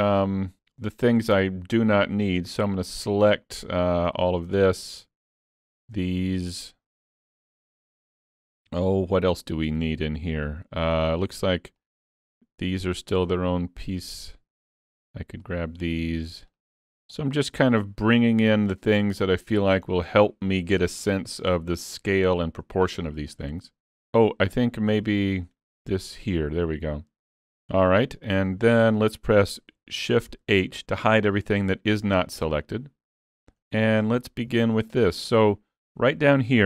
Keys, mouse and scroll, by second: 1.2 click, 2.0 shift+click, 2.7 click, 4.0 click, 4.6 middle click, 5.5 shift+click, 6.0 middle click, 8.4 scroll up 3, 8.8 shift+middle click, 9.8 middle click, 11.9 shift+click, 12.7 shift+click, 13.3 middle click, 14.2 scroll up 3, 14.5 shift+middle click, 15.5 shift+click, 16.5 shift+click, 17.2 shift+click, 17.7 scroll down 4, 18.1 middle click, 19.9 scroll down 2, 20.2 shift+middle click, 21.1 middle click, 22.9 middle click, 24.1-24.5 scroll up 4, 24.5 middle click, 25.8 shift+click, 27.8 middle click, 28.4-28.9 scroll down 4, 28.9 middle click, 30.5 shift+h, 31.4 shift+middle click, 32.5 middle click, 33.6 scroll up 3, 33.9 shift+middle click, 34.6 alt+a, 34.9 middle click, 35.5 shift+middle click, 36.1 click.